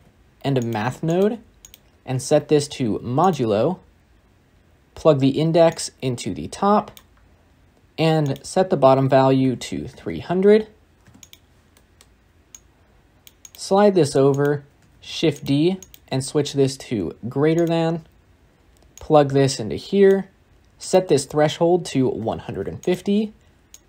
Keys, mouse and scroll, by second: 0.6 shift+a, 3.2-6.9 drag, 11.1 0, 14.8 shift+d, 17.5-20.0 drag, 22.7-23.8 drag.